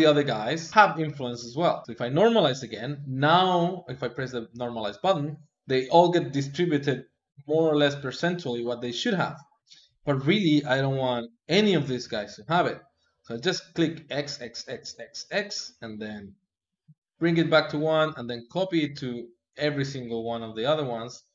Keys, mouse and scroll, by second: 1.8-4.3 drag, 13.2-21.0 drag, 21.0 Tab.